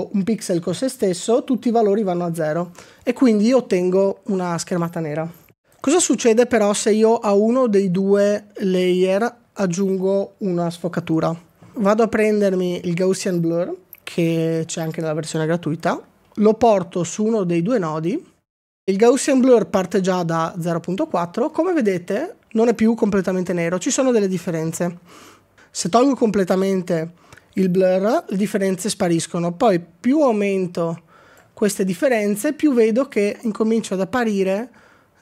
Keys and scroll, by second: 22.5 f.